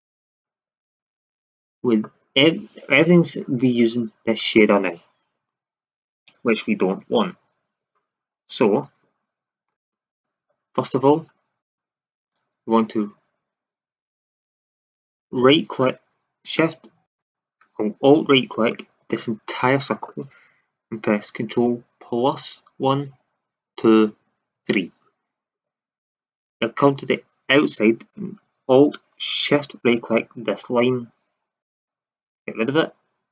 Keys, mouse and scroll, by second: 1.6-3.2 middle drag, 9.3-13.4 middle drag, 14.1-17.0 middle drag, 17.0-20.3 right drag, 22.2 ctrl+KP_Add, 23.4 ctrl+KP_Add, 24.4 ctrl+KP_Add, 31.6-33.3 drag.